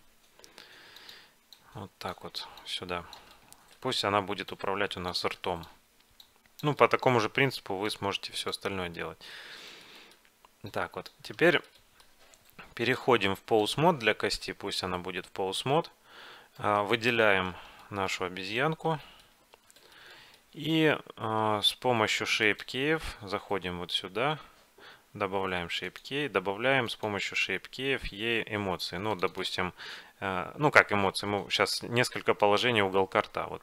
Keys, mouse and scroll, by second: 0.5 s, 1.6-9.7 drag, 3.4-4.4 middle drag, 4.6 middle click, 6.9-8.5 middle drag, 9.0-12.4 middle drag, 10.7-12.5 drag, 12.9-14.7 drag, 16.7-17.9 right drag, 17.6 middle click, 17.9-21.8 middle drag, 22.5-24.4 drag, 26.0-28.9 drag, 29.2-31.3 drag.